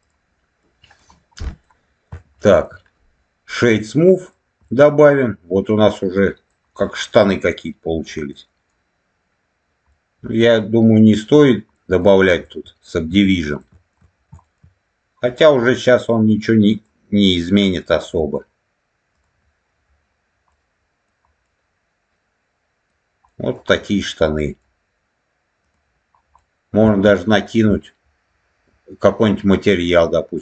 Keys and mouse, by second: 0.0 click, 0.5 middle click, 1.3 middle click, 2.3 shift+middle click, 3.5 right click, 4.5-6.4 middle drag, 6.7-8.0 middle drag, 8.2 middle click, 9.8-11.1 middle drag, 11.6 middle click, 12.3 alt+middle click, 13.1 middle click, 13.5 alt+middle click, 14.3 shift+middle click, 15.2-16.8 drag, 19.6 click, 20.4 middle click, 21.4-22.8 middle drag, 23.2 middle click, 23.8 middle click, 25.5 click, 26.3 middle click.